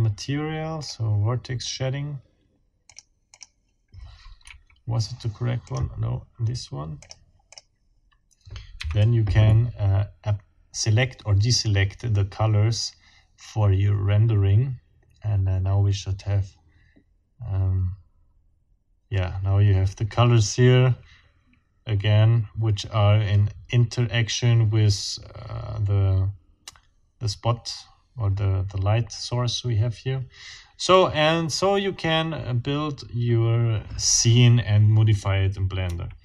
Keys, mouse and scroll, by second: 0.8 click, 2.8 click, 3.4 click, 4.4 Escape, 5.6 click, 7.0 click, 7.5 click, 8.8 F12, 35.8 Escape.